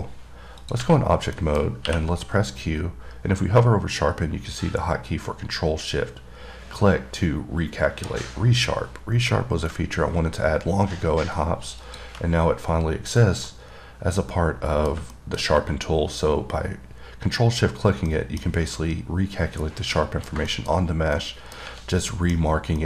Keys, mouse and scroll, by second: 0.8 click, 1.2 scroll down 3, 1.6 middle click, 12.0 click, 13.0-13.4 scroll down 1, 13.4-15.3 middle drag, 15.4 middle click, 18.3 middle click, 20.2 middle click, 20.8 middle click, 21.0 scroll down 1, 21.4 middle click, 22.4 middle click, 22.6-22.8 scroll up 4.